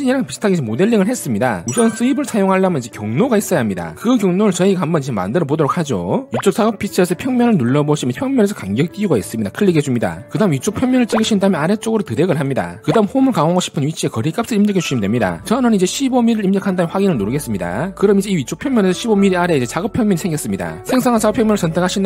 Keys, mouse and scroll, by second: 7.8 click, 10.3 click, 11.9 click, 17.8 click, 18.2-18.7 scroll up 4, 19.3 shift+middle click.